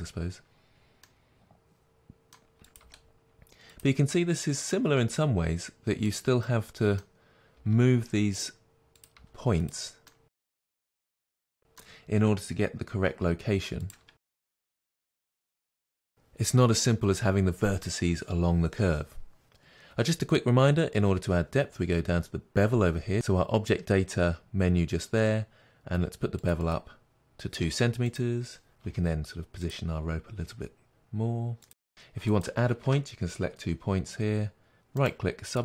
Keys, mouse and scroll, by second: 0.9-2.7 middle drag, 2.7 click, 2.8 g, 3.7 click, 4.0-6.1 middle drag, 5.2 g, 6.1 click, 6.4-8.9 middle drag, 7.7 g, 8.9 click, 9.1 g, 9.6 click, 10.0-13.8 middle drag, 13.8 click, 14.3 shift+click, 14.5 g, 15.1 click, 15.2-26.4 middle drag, 26.4-28.1 drag, 28.8 g, 29.6 click, 31.3 g, 31.5 click, 32.3 shift+click, 35.5 right click.